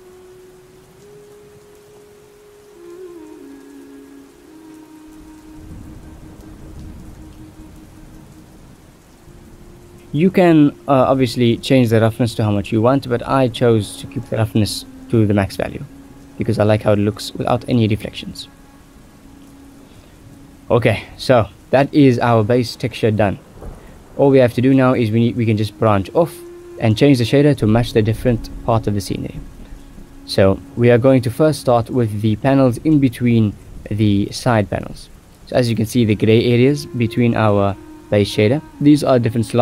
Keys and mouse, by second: 0.5-1.3 drag, 1.9 ctrl+s, 2.6 shift+drag, 4.3-6.0 drag, 6.2-8.1 drag, 9.1 shift+middle click, 9.8 ctrl+s, 9.9 click, 11.9 click, 12.6 middle click, 13.3-14.9 drag, 15.2 shift+middle click, 16.4-18.3 drag, 18.8 shift+middle click, 19.3 ctrl+s, 19.6 shift+middle click, 21.5 click, 22.9-23.2 drag, 23.2 Tab, 23.8 Tab, 24.1 shift+click, 27.7 click, 29.8 click, 38.7-39.6 drag.